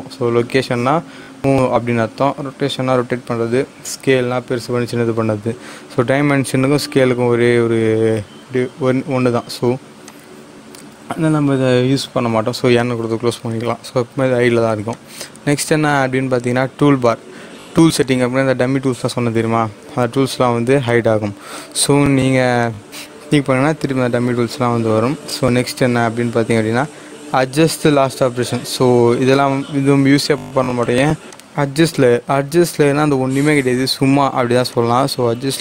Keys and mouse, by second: 10.3 click, 12.2 n, 14.9 click, 17.9 click, 18.0 click, 21.5 click, 25.7 click, 28.4 click, 28.4 click, 30.7 click, 33.7 click.